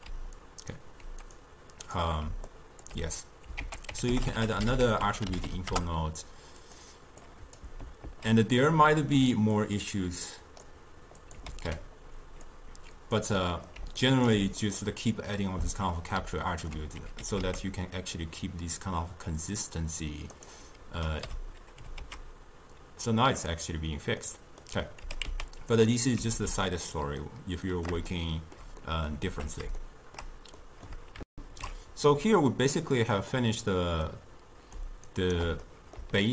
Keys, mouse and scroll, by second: 0.2 d, 0.5-2.1 right drag, 2.3 d, 2.6 click, 3.0 d, 3.7 ctrl+a, 4.3 t, 7.3 click, 8.2 ctrl+h, 9.1 ctrl+h, 9.7-11.4 drag, 11.6 ctrl+h, 12.6 click, 13.6 middle click, 13.9 d, 14.1 right click, 14.4 d, 14.7-17.3 middle drag, 17.3 g, 21.2 click, 21.4 m, 22.0 g, 24.4 middle click, 25.2 r, 26.4 alt+r, 27.3-29.4 middle drag, 29.4 alt+g, 29.9-31.3 shift+middle drag, 31.3 ctrl+shift+q, 32.8-34.1 middle drag, 34.1 click, 35.1 shift+right click, 35.7-36.3 middle drag.